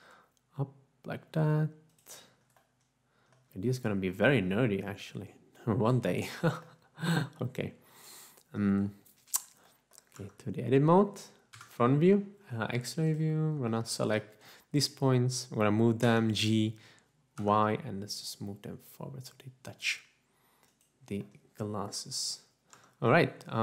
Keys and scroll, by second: 11.5 Tab, 11.8 3, 16.1 g, 17.7 y, 23.4 Tab.